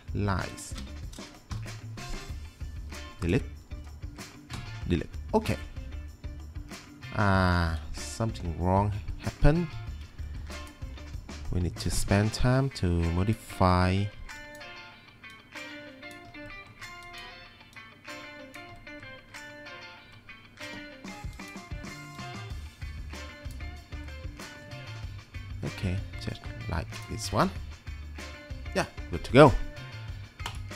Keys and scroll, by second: 1.6 Delete, 4.6 Delete, 9.9 1.